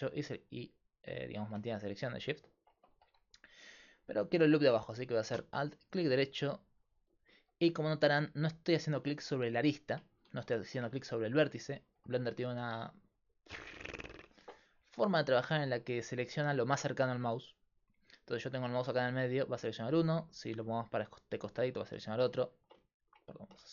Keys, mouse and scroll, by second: 2.6-9.3 right drag, 10.1 middle click, 10.5-14.7 middle drag, 19.3-22.9 right drag, 22.5 click, 22.6-23.7 drag.